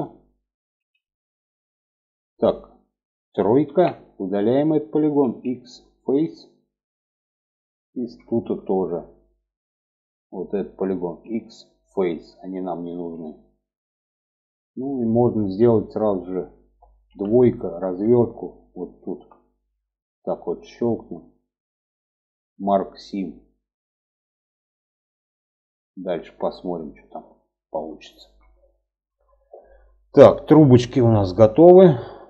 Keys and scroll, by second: 3.0 3, 4.6 x, 10.6 x, 12.5 alt+z, 16.4 2.